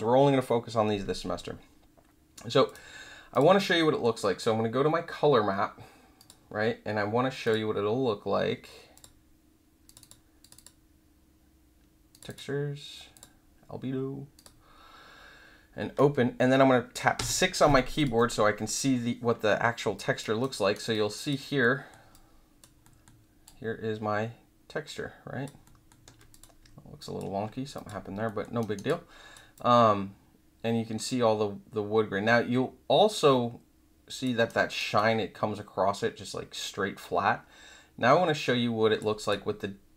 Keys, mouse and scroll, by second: 2.6 click, 3.3 click, 6.1 click, 7.4 click, 8.9 click, 9.8 click, 10.0 click, 10.4 click, 10.5 click, 12.1 click, 12.2 click, 13.1 click, 14.3 click, 17.9 click, 19.9 alt+click, 20.4 alt+right click, 20.9 alt+click, 21.6 alt+middle click, 22.1-22.6 alt+drag, 22.8 alt+middle click, 23.4-25.4 alt+drag, 25.6 alt+middle click, 26.3 click, 26.9 alt+click, 27.7 click, 28.2 alt+middle click, 28.6 alt+right click, 28.8 alt+click, 29.5-34.2 alt+drag, 34.5 alt+right click, 34.9-38.9 alt+drag, 39.2 click.